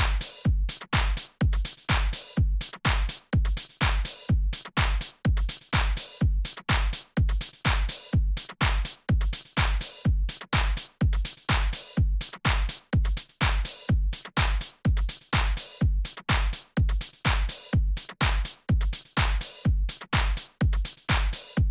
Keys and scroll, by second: 6.1 shift+super+a, 6.4 super+z, 8.5 d, 9.6 super+d, 9.7 super+a, 9.8 shift+super+l, 11.4 super+Left, 20.5-21.3 typing.